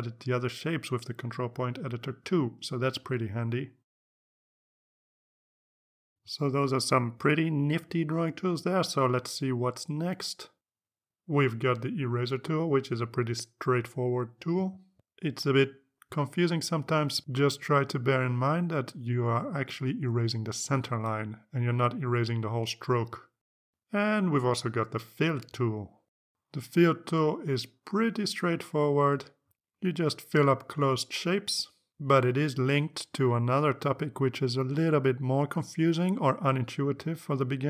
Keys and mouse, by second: 0.5 click, 1.7 click, 2.9 click, 3.9 click, 4.9 click, 12.6 click, 13.9-14.9 drag, 15.2 click, 16.1 click, 17.0 click, 18.0 click, 18.8 click, 19.7 click, 21.7 click, 23.8 ctrl+z, 26.0 ctrl+z, 27.6 click, 28.9 click, 32.6 ctrl+z, 34.4 click.